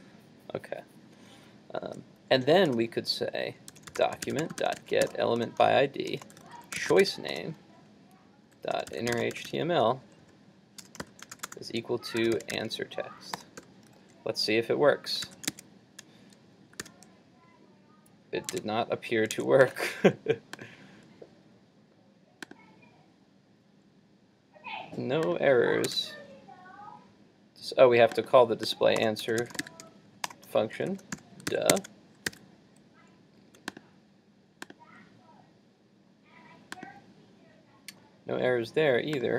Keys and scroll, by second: 15.3 super+s, 15.6 super+Tab, 16.8 super+r, 18.6 super+Tab, 31.5 super+s, 31.7 super+Tab, 32.3 super+r.